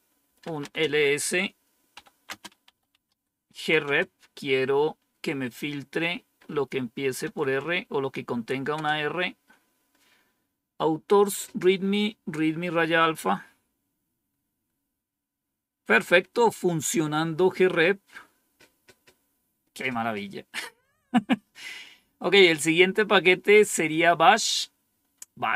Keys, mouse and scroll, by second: 0.0-3.9 typing, 7.1 typing, 8.6 Return.